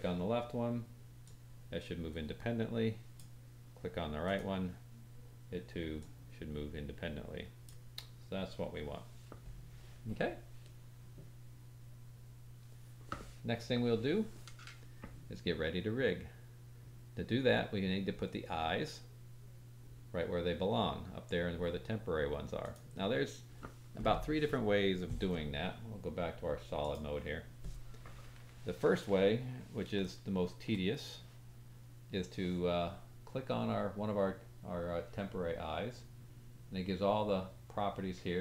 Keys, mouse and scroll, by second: 1.2-3.1 drag, 4.2 click, 5.9-7.6 drag, 22.6 click, 26.8 click, 30.1-30.7 shift+middle drag, 33.6 click, 33.7-37.1 middle drag.